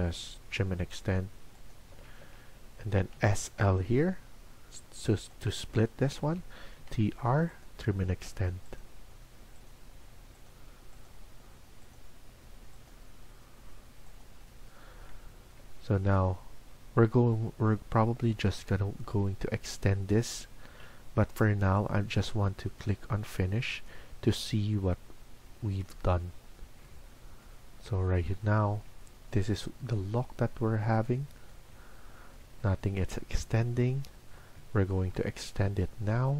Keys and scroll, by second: 1.8 Escape, 2.1 Escape, 3.0-3.5 typing, 5.9 Escape, 6.2 Escape, 6.7 typing.